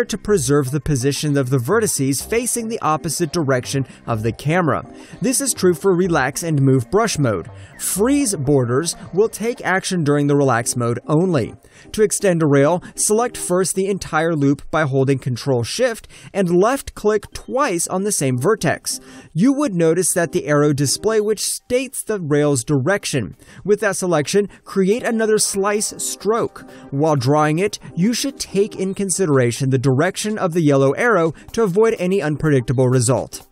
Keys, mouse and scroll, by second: 1.6 alt+click, 3.7 alt+click, 4.7 middle click, 8.9 alt+click, 11.0 click, 12.2 middle click, 14.3 alt+middle click, 15.4 alt+click, 16.5 alt+right click, 17.2 click, 17.6 alt+right click, 18.5 ctrl+shift+click, 27.3 alt+click, 28.0 shift+click, 29.1 alt+click, 30.1 alt+right click, 30.4 alt+middle click, 31.0 alt+click.